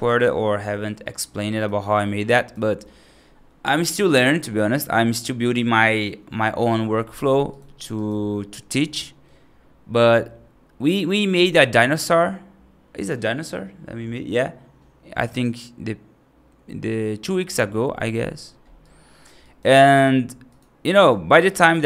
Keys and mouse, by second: 1.4 right click, 2.2 right click, 7.4 right click, 7.8 right click, 8.1 middle click, 8.6 right click, 18.8 right click, 19.3 right click, 20.4 click, 21.4 right click.